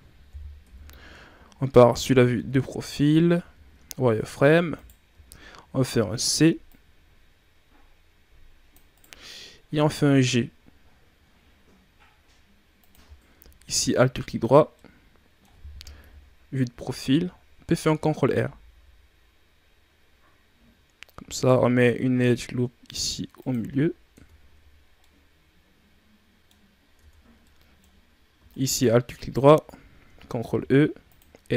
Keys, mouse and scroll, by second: 0.5 KP_3, 1.6-2.3 shift+scroll up 7, 2.3 Tab, 2.7-3.1 ctrl+scroll down 2, 3.1 scroll up 1, 3.3 z, 3.9 ctrl+scroll down 1, 4.7 right click, 5.0 c, 9.7 g, 12.9 z, 13.1 alt+right click, 14.4 scroll down 3, 14.7-15.9 middle drag, 15.9 KP_3, 17.6 ctrl+b, 23.5 z, 24.0 Tab, 24.7 scroll down 2, 24.9-26.6 middle drag, 26.6-26.9 scroll up 3, 26.9 Tab, 27.3-28.4 middle drag, 28.4 alt+right click, 29.1 alt+right click, 30.3 ctrl+e.